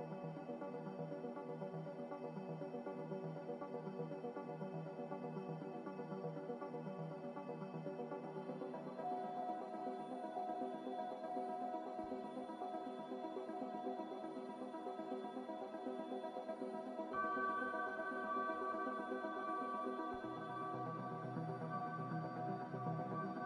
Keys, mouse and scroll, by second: 1.3 Delete, 6.8 a, 8.0 m, 18.6 a.